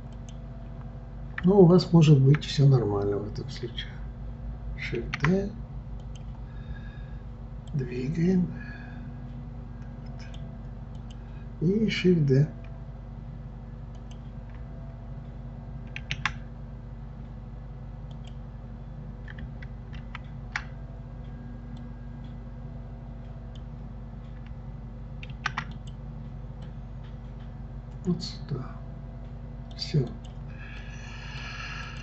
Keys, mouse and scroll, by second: 0.2 click, 5.0 shift+d, 7.7-10.7 drag, 11.0 click, 14.0 click, 16.0 shift+d, 20.0 ctrl+z, 21.8-24.8 drag, 25.3 shift+d, 26.6-29.6 drag, 30.1-32.0 drag.